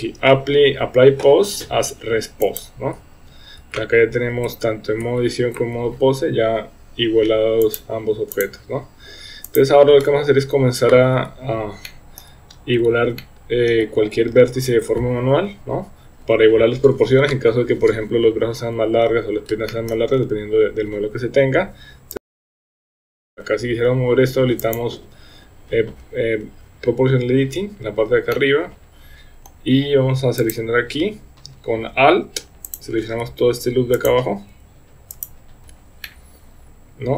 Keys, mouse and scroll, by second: 3.6 Tab, 4.5 Tab, 5.0 Tab, 5.6 Tab, 7.7 click, 9.4 click, 11.8-12.2 shift+middle drag, 13.2-13.7 shift+middle drag, 19.7 shift+middle click, 22.1 click, 22.4 Tab, 22.5 Tab, 22.5 shift+middle click, 22.6 Tab, 23.2 KP_1, 23.3 shift+middle click, 23.3 KP_3, 24.6 click, 28.3-29.5 middle drag, 32.8 alt+click, 34.1 click, 35.2 alt+click, 36.0-37.1 middle drag.